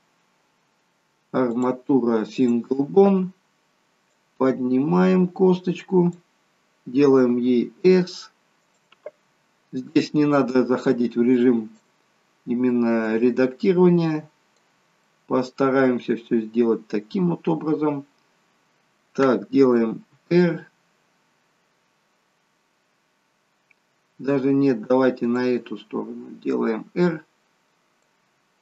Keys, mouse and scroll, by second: 4.3 click, 7.5 s, 10.7 click, 13.1 click, 15.2 middle click, 20.3 r, 26.6 click.